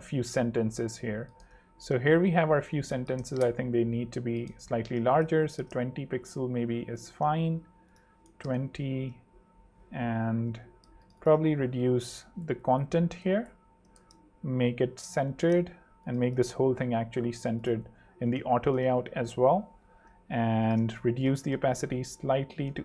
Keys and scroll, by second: 1.0 super+3, 2.0 super+2, 2.8-3.7 typing, 5.1 super+3, 5.7 super+2, 6.4 super+Escape, 8.1 super+2, 8.3 0, 8.4 Home, 8.9 super+3, 10.3 super+2, 12.5 BackSpace, 13.0 ↻, 13.3 super+3, 13.9 super+2, 18.9 super+3, 19.9 super+2, 20.9 super+6, 21.3 super+6, 21.4 super+3, 21.8 super+2, 22.2 super+8.